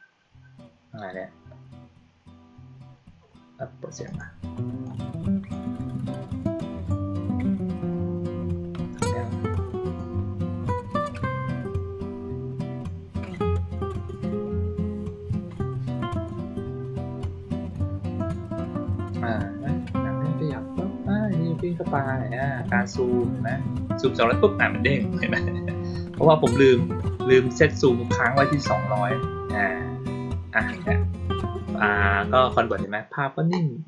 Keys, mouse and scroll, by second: 3.9 click, 4.7 click, 32.5 click.